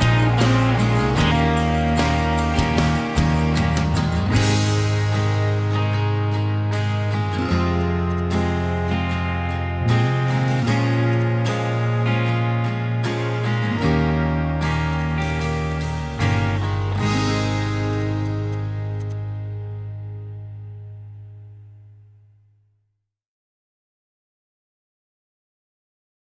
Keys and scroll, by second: 2.6 ctrl+g, 2.7 ctrl+h, 4.8 ctrl+s, 8.6 b, 10.9-13.0 typing, 15.5 b, 16.9 Escape, 18.7 b, 19.2 Escape, 21.2 Escape.